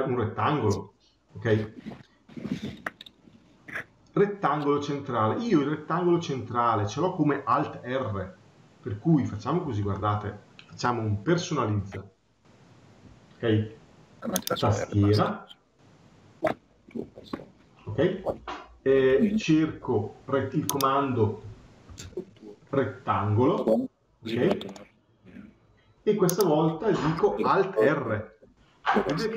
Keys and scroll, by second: 9.4 Escape.